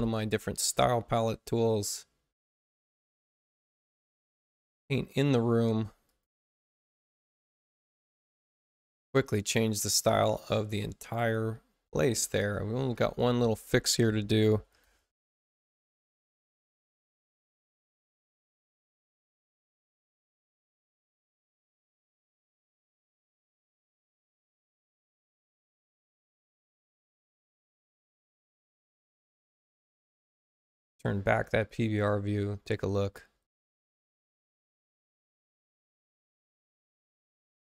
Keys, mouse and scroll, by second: 1.5 click, 6.0 click, 7.2 click, 9.5 space, 10.5 space, 12.9 click, 14.2-15.4 typing, 17.9 click, 20.1 click, 21.9 click, 23.8 click, 24.9 click, 26.5 click, 28.4 click, 31.6 click, 33.6 click.